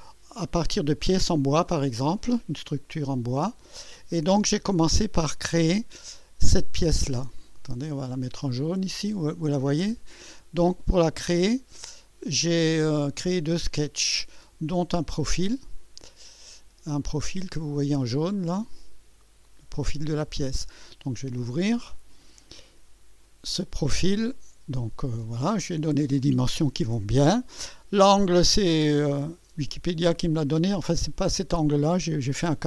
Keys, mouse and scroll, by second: 1.3 right click, 1.9 scroll down 1, 2.4-4.2 drag, 7.1 click, 11.5 click, 11.8 space, 14.8 scroll up 2, 17.3 scroll up 2, 20.6 click, 21.8 scroll down 1, 22.3 right click, 22.9 scroll up 1, 23.5 right click, 24.0 scroll up 1, 24.6 right click, 25.2 scroll up 2, 29.3 click.